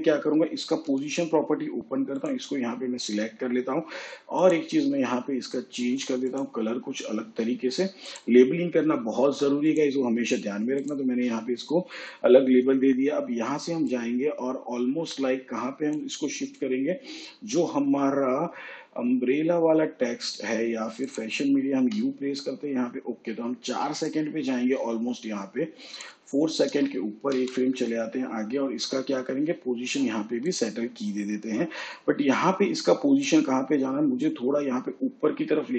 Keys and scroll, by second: 0.9 p, 21.8 u, 27.3 ctrl+Right.